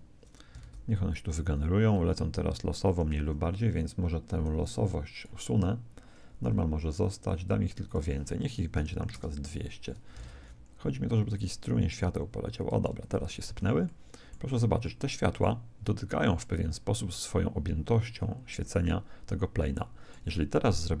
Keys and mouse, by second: 0.6 alt+a, 2.9 Escape, 3.8 middle click, 4.6 click, 7.8 click, 8.9 0, 10.2 alt+a, 13.8 alt+a, 13.8-16.7 middle drag, 19.7-21.0 middle drag.